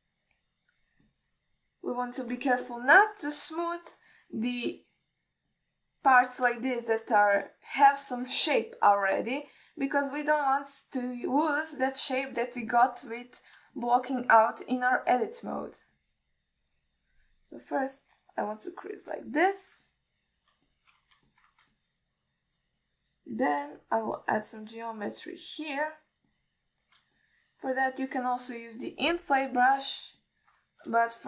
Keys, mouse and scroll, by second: 0.4 shift+middle click, 1.2-2.1 shift+drag, 2.3-3.6 shift+drag, 3.9 middle click, 4.6 alt+shift+middle click, 5.4 ctrl+middle click, 6.8 middle click, 7.9 ctrl+alt+middle click, 10.6-11.5 alt+middle drag, 12.2 shift+middle click, 13.0 click, 13.5 alt+shift+middle click, 13.9 ctrl+middle click, 14.3 middle click, 15.0-16.1 shift+drag, 16.3 alt+middle click, 17.2-18.5 shift+drag, 19.1-20.3 shift+drag, 21.1-21.7 alt+middle drag, 22.0-22.3 alt+shift+middle drag, 22.5 ctrl+middle click, 23.0 shift+click, 24.0-24.5 drag, 24.7 middle drag, 25.4-26.5 drag, 26.7 click, 27.6 alt+middle click, 28.5 shift+click, 30.1-31.1 drag.